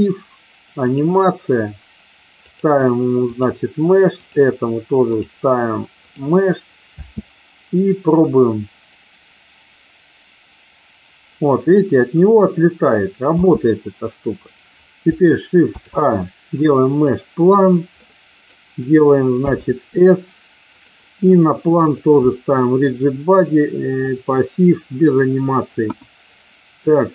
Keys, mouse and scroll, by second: 0.8 click, 2.4 click, 5.1 click, 7.0 space, 13.3 space, 15.6 shift+a, 17.9 middle click, 19.5 s, 20.7 click, 21.8 click, 23.5 click, 25.8 KP_1.